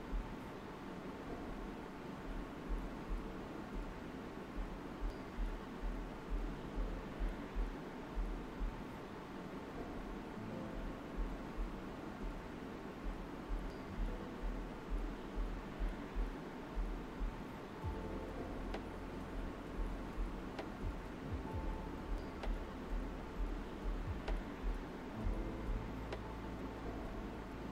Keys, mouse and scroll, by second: 0.5 alt+right click, 3.4 alt+right click, 4.7 alt+right click, 5.1 alt+right click, 8.3-10.3 alt+right drag, 10.3-14.0 drag, 13.7 typing, 14.0 shift+click, 15.0 alt+right click, 15.9-17.5 shift+drag, 19.5 shift+click, 20.4-22.9 alt+right drag, 22.9 click, 23.6 shift+click, 24.1 right click, 24.1 typing, 24.1 right click, 24.9 click, 25.5 shift+click, 26.9-27.7 shift+drag.